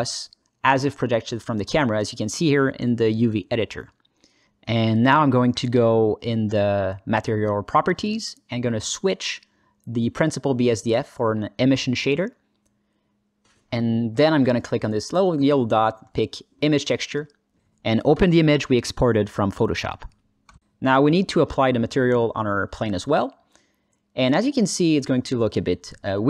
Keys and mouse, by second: 0.1 alt+shift+middle click, 1.4 ctrl+middle click, 2.3 alt+shift+middle click, 9.9 Tab, 11.1-14.2 drag, 15.5-17.1 drag, 21.2 click, 22.4-23.6 drag.